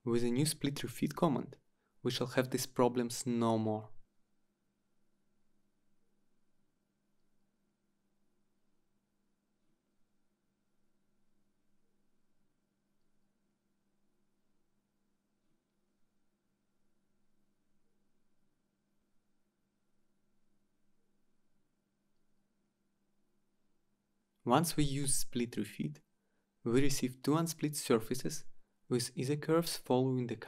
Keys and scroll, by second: 13.9 Return, 27.2 Return.